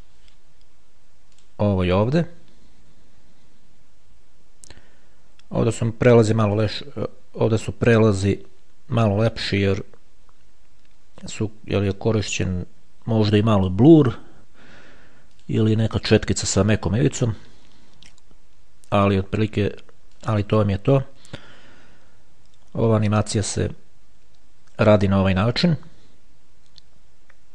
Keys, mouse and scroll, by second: 1.6 click, 6.8 click, 15.6 click, 20.3 click.